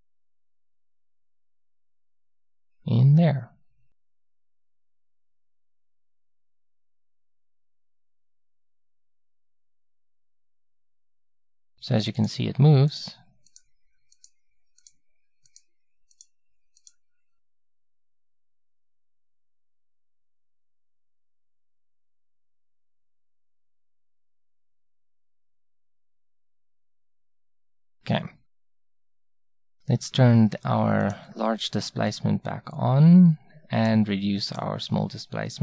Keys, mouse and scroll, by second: 6.2-7.8 middle drag, 7.8-10.3 drag, 29.4-32.0 drag, 34.5-35.6 drag.